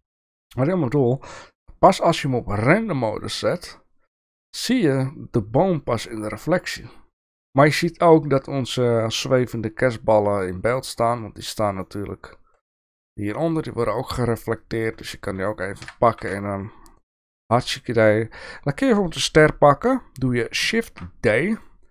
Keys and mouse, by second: 10.7 click, 11.8-12.4 middle drag, 13.1 shift+middle drag, 14.6 click, 15.0 shift+middle click, 15.8 g, 20.8 shift+d.